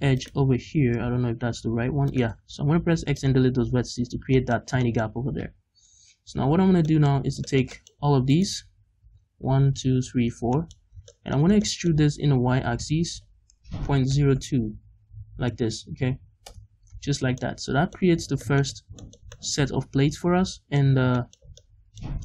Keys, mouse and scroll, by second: 1.0 g, 2.2 right click, 2.4 x, 3.5-4.2 scroll down 1, 4.3-8.3 middle drag, 4.7 scroll down 2, 5.8 KP_5, 6.5-8.3 drag, 6.5-7.7 right drag, 6.5-6.9 scroll down 2, 7.1 scroll up 2, 8.3 right click, 9.0 l, 10.5-12.1 middle drag, 10.7-11.1 scroll up 2, 12.5 e, 16.5 Return, 17.3 middle click, 17.3 scroll down 1, 18.0-19.0 scroll up 6, 18.1 Tab, 18.4 middle click, 19.0-22.2 shift+middle drag, 21.0 scroll down 2, 22.1-22.2 scroll up 2.